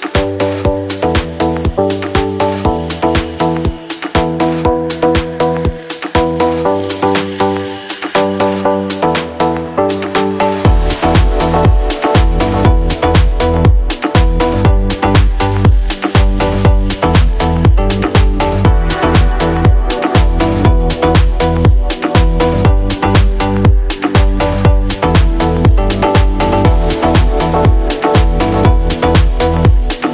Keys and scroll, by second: 0.0-2.5 typing, 2.4 Escape, 2.9 Delete, 3.2 ctrl+c, 3.3 ctrl+v, 6.7 t, 6.9 n, 8.3 d, 8.5 s, 9.5 g, 9.9 Escape, 10.2 g, 10.3 x, 11.0 n, 13.8-14.6 typing, 15.7-19.4 typing, 19.6 Return, 21.6-23.6 typing, 21.6 Return, 26.4-29.5 typing.